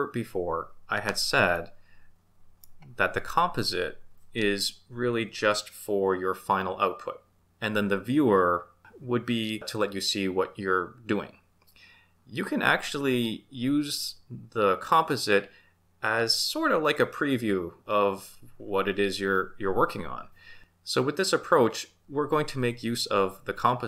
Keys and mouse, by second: 1.5-2.6 middle drag.